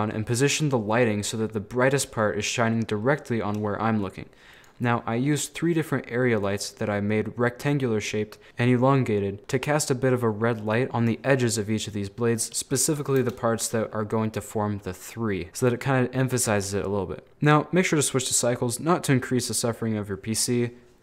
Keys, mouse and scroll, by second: 2.8-4.6 middle drag, 4.6 right click, 4.9 scroll up 1, 5.0-6.4 middle drag, 6.4 click, 6.8 scroll up 1, 6.8-8.5 middle drag, 8.5-8.9 scroll up 2, 8.9-10.9 middle drag, 12.1-13.2 middle drag, 13.2 KP_0, 13.8-15.7 scroll up 1, 16.5 z, 18.0-21.0 drag.